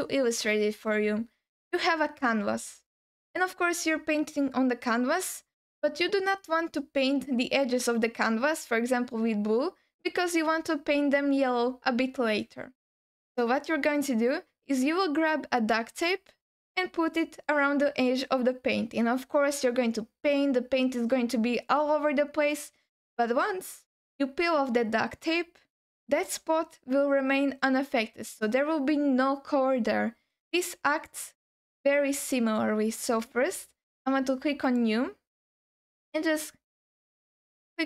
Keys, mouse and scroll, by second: 34.6-37.8 drag.